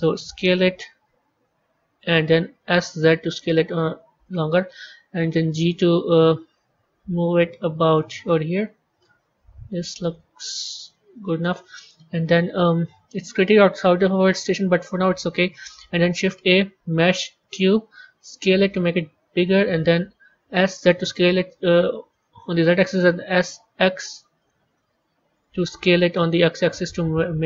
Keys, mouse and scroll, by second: 0.5 s, 2.5 s, 5.0 g, 8.1-10.7 middle drag, 10.7 KP_1, 11.0 KP_3, 16.0 shift+a, 18.3 s, 20.5 s, 23.3 s, 24.6-25.8 middle drag, 25.8 s.